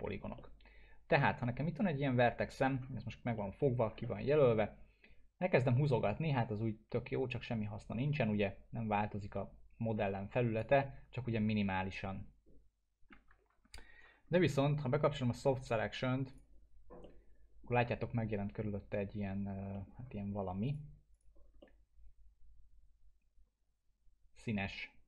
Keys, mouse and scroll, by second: 0.0 scroll up 1, 0.4-2.9 alt+middle drag, 3.0-3.3 scroll up 1, 3.4-4.0 middle click, 3.8 scroll down 1, 4.0-4.6 alt+middle drag, 5.5-13.3 drag, 10.8-13.5 alt+middle drag, 13.5 ctrl+z, 13.9-14.2 scroll up 1, 14.3-14.9 alt+middle drag, 16.3 click, 17.0-17.6 alt+middle drag, 20.6 click, 21.6-25.0 alt+middle drag.